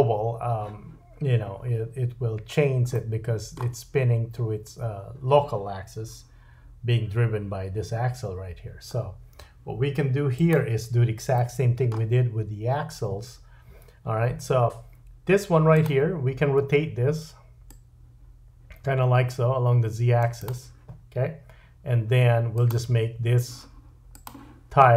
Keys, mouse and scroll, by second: 2.9 middle click, 10.5-15.7 middle drag, 15.7 click, 15.8-17.6 middle drag, 17.6-20.4 drag, 20.4-22.5 middle drag, 22.5 click, 22.7-24.1 middle drag, 24.1-24.9 drag.